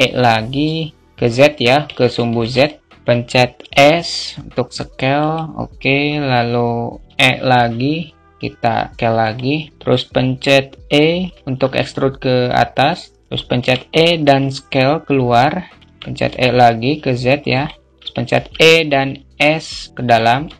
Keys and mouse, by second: 2.0 alt+shift+middle click, 20.0 alt+middle click.